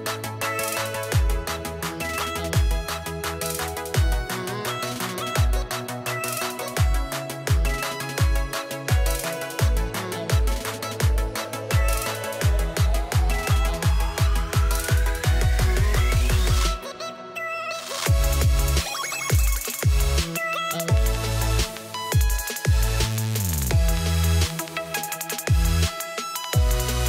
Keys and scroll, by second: 2.1 ctrl+t, 15.3-16.3 typing, 16.6 Return.